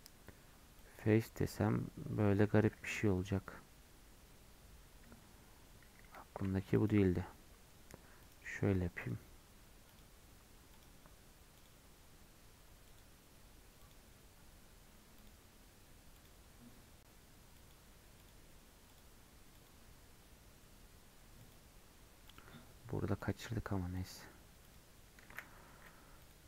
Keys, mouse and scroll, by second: 1.5-2.7 middle drag, 2.7 ctrl+z, 3.4-4.6 scroll up 10, 4.6-4.9 scroll down 8, 5.3-6.0 scroll up 1, 6.8-25.7 alt+shift+drag, 25.7 x.